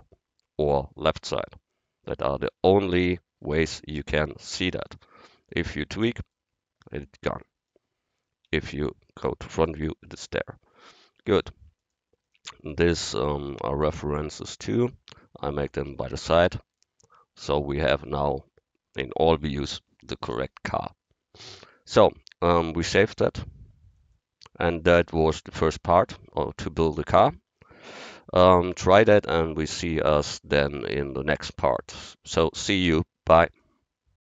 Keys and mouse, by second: 1.3 KP_7, 2.6 ctrl+KP_3, 4.8 KP_1, 8.5 KP_1, 15.8 a, 16.5-18.0 middle drag, 18.0-19.3 middle drag, 22.8-23.9 middle drag.